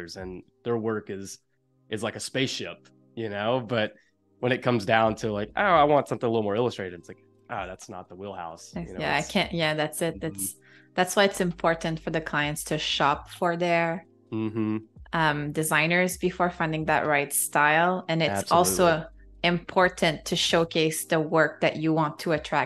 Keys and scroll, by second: 3.8 super+=, 4.7 space, 6.3 super+=, 9.7 space, 11.1 super+-, 11.7 space, 13.1 super+-, 13.5 space.